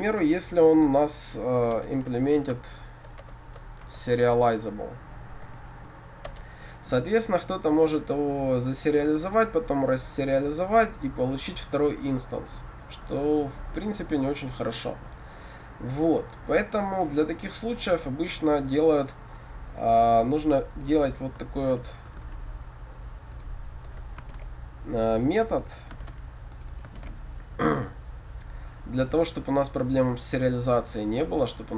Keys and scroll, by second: 3.3 Return, 6.3 Return, 24.5 ctrl+v, 26.1 ctrl+c, 27.0 ctrl+v.